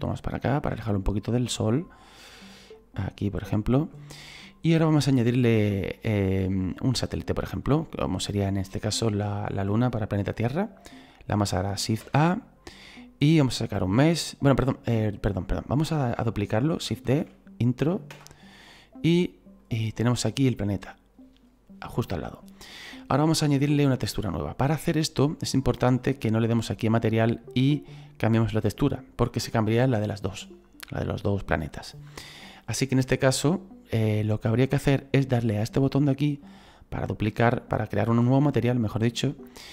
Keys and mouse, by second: 0.2 shift+middle click, 3.6 shift+middle click, 5.5 middle click, 6.5 shift+middle click, 7.2 right click, 7.8 middle click, 8.5 shift+middle click, 12.0 shift+a, 14.6 click, 15.5 right click, 18.1 Return, 18.1 KP_Enter, 19.6 click, 26.1 click, 36.4 click.